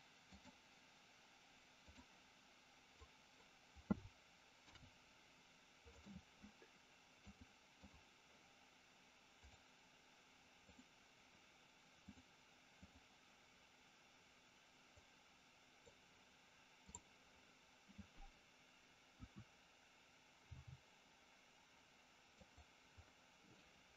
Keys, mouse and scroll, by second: 0.3-2.1 drag, 2.8 click, 4.5 ctrl+p, 7.2 click, 11.9 click, 14.9 click, 16.8 click, 18.9 KP_1, 20.3 g, 22.3 click, 23.5 scroll up 1, 23.5-23.9 middle drag.